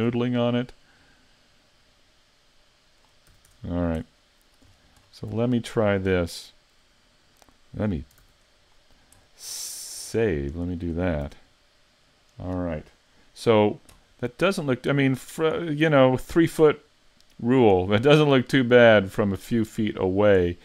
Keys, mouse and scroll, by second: 0.3 middle click, 2.0 click, 3.3 a, 3.5 Tab, 3.6 scroll down 4, 4.1 middle click, 4.7-5.3 scroll down 5, 5.5 shift+middle click, 8.2 s, 9.2-10.2 scroll down 3, 9.6 middle click, 10.2 shift+middle click, 10.6-11.3 scroll up 1, 11.3 scroll up 1, 11.3 a, 11.6 middle click, 14.2 scroll down 3, 14.7 middle click, 15.7-16.3 scroll up 3, 16.3 middle click, 17.9 scroll up 4, 18.3 shift+middle click, 19.4 middle click, 20.0-20.5 scroll down 5, 20.5 middle click.